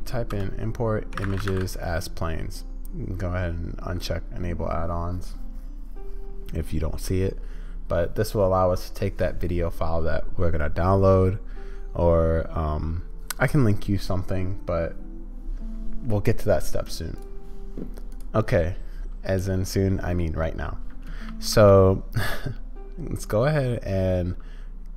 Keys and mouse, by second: 21.3 shift+a.